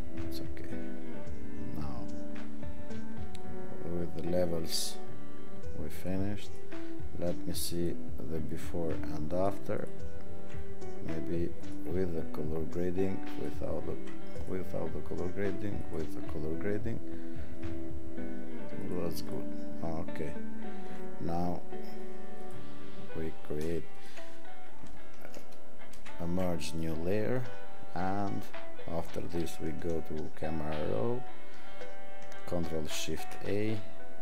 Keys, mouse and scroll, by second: 7.9 alt+click, 8.6 alt+click, 9.5 alt+click, 9.9 alt+click, 19.0 alt+click, 19.4 alt+click, 25.9 ctrl+alt+shift+e, 29.3 ctrl+shift+a.